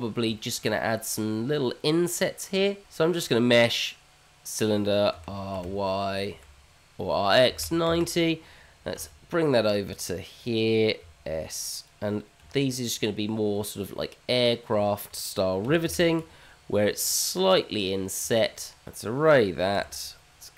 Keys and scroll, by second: 3.6 shift+a, 6.0 r, 8.9 g, 11.0 s, 12.4 g, 13.9 g, 15.3 g, 17.6 g, 19.0 q.